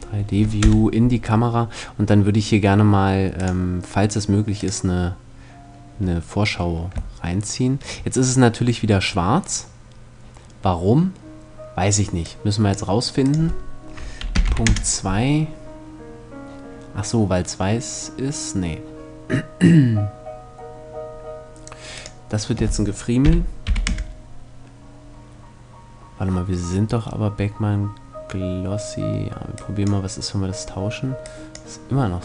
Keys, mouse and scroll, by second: 0.0 click, 0.2 KP_0, 9.4 click, 14.3 click, 29.4 click.